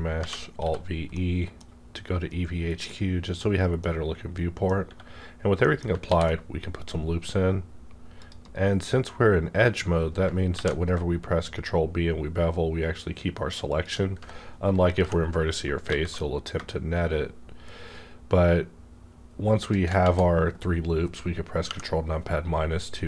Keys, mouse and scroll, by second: 0.1 v, 0.5 e, 1.2-3.9 middle drag, 1.2 e, 3.9 scroll down 1, 5.6 middle click, 6.0 ctrl+r, 6.4 scroll up 1, 8.1 click, 8.4 right click, 10.0 right click, 10.0 scroll up 1, 10.5 ctrl+b, 12.2-12.7 shift+scroll up 1, 13.7 shift+click, 15.0 ctrl+KP_Subtract, 15.8 alt+s, 19.6 shift+right click, 20.0 ctrl+z, 21.6 KP_Subtract.